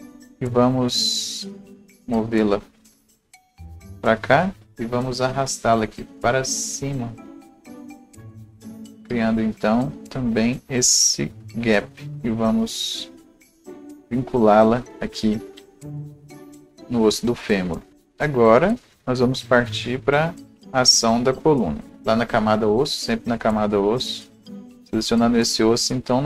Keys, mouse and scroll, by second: 0.2 right click, 0.7 click, 1.8-13.7 drag, 15.2-16.3 scroll up 1, 18.0-22.0 right drag, 18.0 scroll up 1, 20.3-22.0 drag, 24.8-26.2 drag.